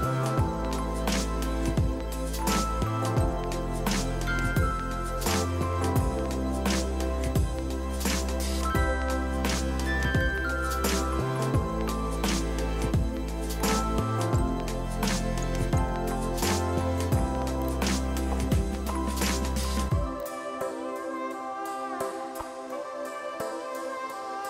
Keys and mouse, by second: 15.6 KP_1.